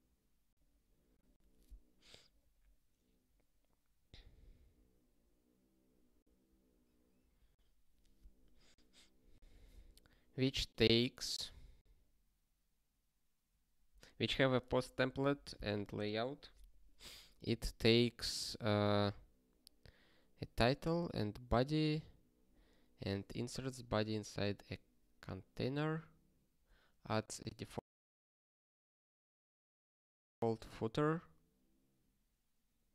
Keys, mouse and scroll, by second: 0.7 scroll up 1, 2.5-3.6 scroll up 1, 3.6-5.6 scroll up 2, 5.6 click, 8.2 scroll down 1, 9.1 scroll down 1, 10.9-12.4 scroll down 1, 21.8 click, 23.6 click, 26.3 click, 30.2 click.